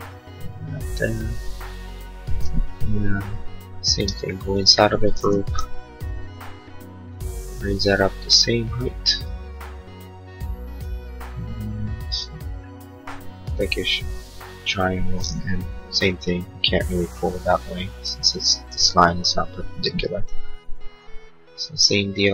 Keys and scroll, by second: 3.0 l, 3.9 space, 15.4 p, 17.8 Escape.